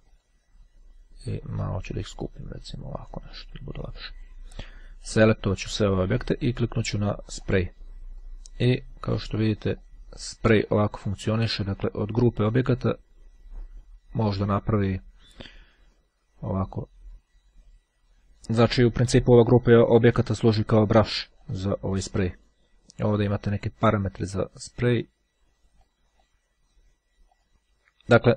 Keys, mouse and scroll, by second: 0.2 click, 1.2 click, 3.2 click, 4.6 click, 7.5 click, 9.2 click, 9.8-11.1 drag, 11.4 click, 12.4-19.0 drag, 20.5-22.1 drag, 25.8 click.